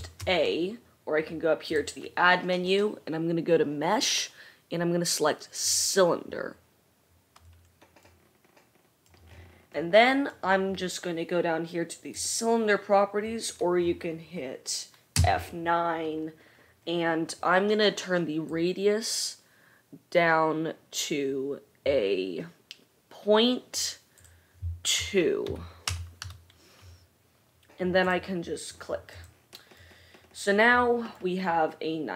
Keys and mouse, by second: 0.0 shift+a, 1.7-10.7 drag, 10.7 right click, 10.9-12.2 drag, 12.3-28.7 drag, 15.3 F9, 28.7 middle click, 29.3 click, 29.5-32.1 middle drag.